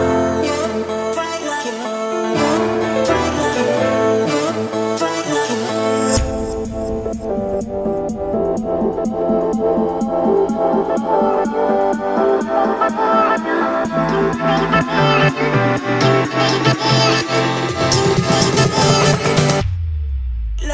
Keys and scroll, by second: 2.0 Return, 2.4 Escape, 6.4 a, 8.3 s, 11.7 Escape.